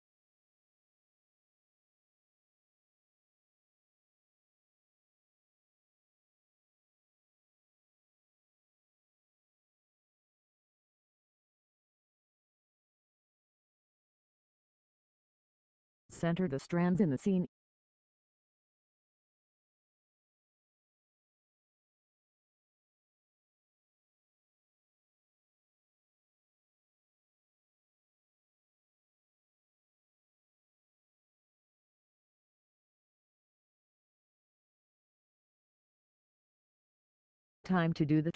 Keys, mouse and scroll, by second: 1.6 click, 7.9 click, 10.6 click, 24.0 Pause, 29.2 click.